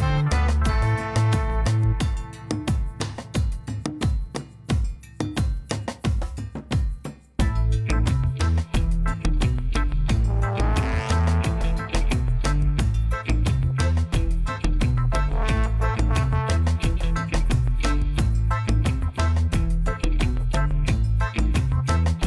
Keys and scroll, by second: 1.5 1, 2.1 shift+z, 4.6 1, 6.6 shift+z, 17.9 1, 20.4 shift+z, 21.5 g, 21.9 z.